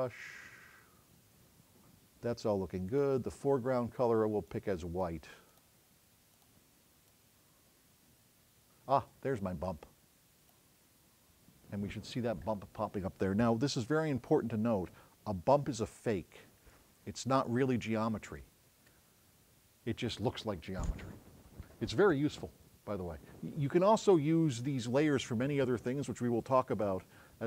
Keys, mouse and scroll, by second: 15.9-16.4 scroll up 6.